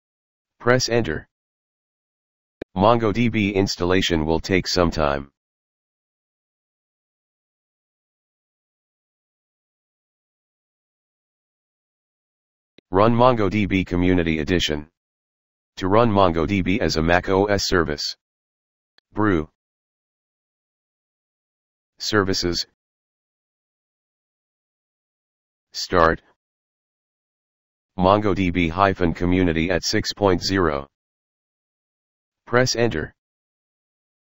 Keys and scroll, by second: 23.6 typing.